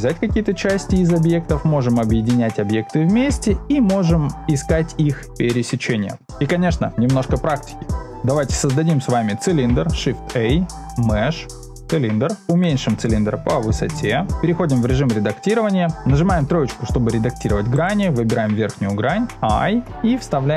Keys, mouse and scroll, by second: 0.0 middle click, 0.7-1.8 middle drag, 3.2-4.2 middle drag, 6.2 super+z, 9.9 shift+a, 12.6 s, 13.0 z, 15.2 Tab, 15.9 2, 16.4 3, 17.7 click, 18.5 middle click, 19.8 i.